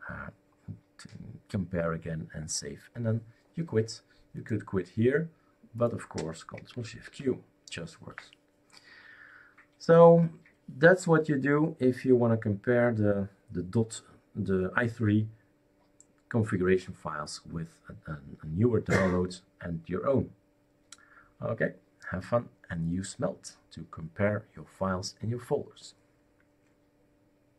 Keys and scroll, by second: 7.0 shift+super+q.